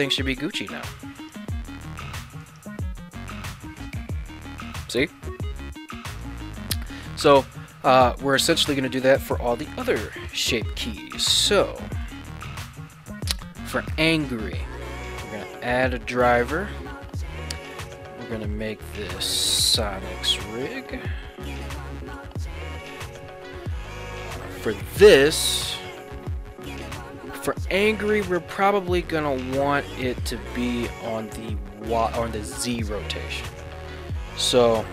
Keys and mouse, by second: 1.2 right click, 2.2 ctrl+Tab, 2.5 click, 3.3 g, 3.9 z, 6.1 right click, 11.4 ctrl+Tab, 12.0 right click, 14.6-28.8 right drag, 21.7 Down, 29.2-33.1 middle drag.